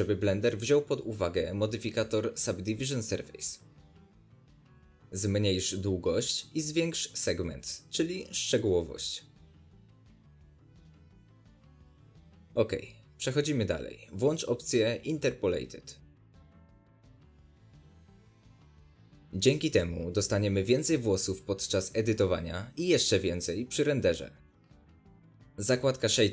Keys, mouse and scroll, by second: 2.2-6.7 middle drag, 3.0-3.6 scroll down 2, 4.3-4.9 scroll up 2, 5.2 scroll up 1, 6.7-13.3 drag, 12.1 Return, 13.3 scroll down 1, 13.3-15.3 middle drag, 15.3-16.4 drag, 16.4-18.4 scroll down 1, 18.4-23.7 drag, 23.7-26.3 middle drag.